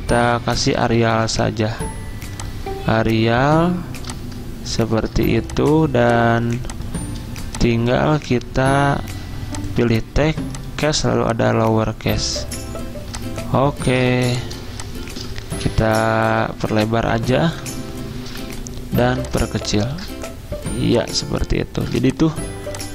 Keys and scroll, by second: 0.6-1.8 typing, 6.1 z, 8.1 v, 14.2 z, 15.7 alt+Right, 15.9 alt+Right, 16.0 alt+Right, 16.2 alt+Right, 16.3 alt+Right, 16.5 alt+Right, 16.7 alt+Right, 17.5 alt+Left, 18.3 v.